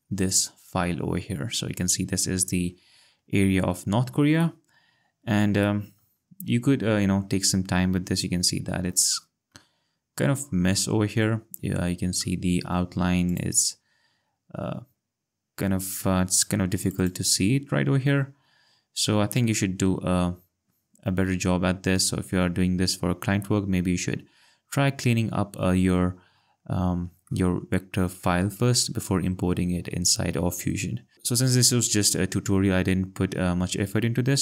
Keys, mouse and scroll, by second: 0.3 click, 3.3-4.1 ctrl+scroll, 6.0 click, 6.4-7.0 scroll, 9.1 ctrl+click, 12.2 click, 12.7 click, 13.3 click, 16.3 click, 20.4-21.7 ctrl+scroll, 21.9-22.8 scroll, 24.4 ctrl+scroll, 27.9 click, 31.1 ctrl+scroll, 32.2-33.2 scroll.